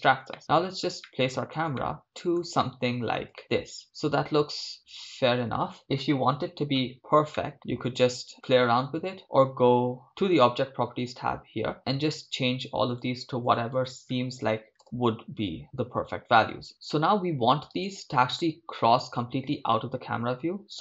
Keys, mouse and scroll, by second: 0.4 shift+middle click, 1.1 middle click, 1.8 shift+middle click, 2.6 ctrl+middle click, 3.4 ctrl+middle click, 3.4 shift+space, 7.4 shift+middle click, 14.8 click.